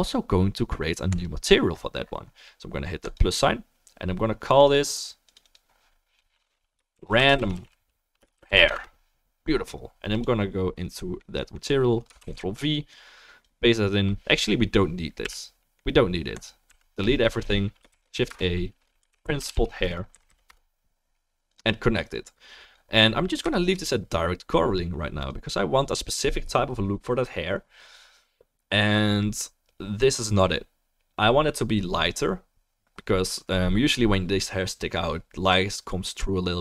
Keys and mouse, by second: 1.2-3.1 drag, 4.9-10.2 drag, 4.9-27.9 middle drag, 4.9-36.6 right drag, 12.2 ctrl+v, 12.9-16.5 drag, 15.2 Delete, 16.7 Delete, 17.9 shift+a, 20.3 Down, 22.2-25.5 drag.